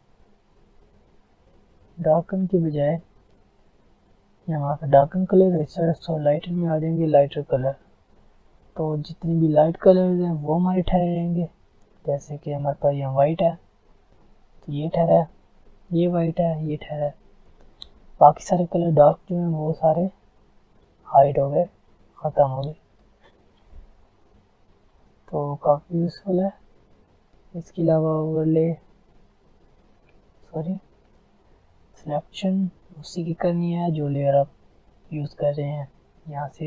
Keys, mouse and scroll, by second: 7.9 click, 8.4 alt+scroll down 2, 8.6-9.4 alt+scroll up 2, 9.4-10.2 alt+scroll up 2, 10.2-11.0 alt+scroll up 1, 11.0 click, 11.5-12.5 alt+scroll up 2, 12.5-14.0 alt+scroll up 2, 12.7 click, 16.0-18.3 drag, 19.3 click, 19.9 alt+scroll down 1, 20.9-21.3 alt+scroll up 1, 21.5-21.9 alt+scroll down 1, 21.9 alt+scroll up 1, 23.0 alt+scroll down 1, 23.3 alt+scroll up 1, 23.6 alt+scroll down 1, 23.8 alt+scroll up 1, 23.9 alt+scroll down 1, 24.4 alt+scroll up 1, 25.7 click, 28.7 click, 30.2 ctrl+z, 30.6 click, 31.1 ctrl+alt+z.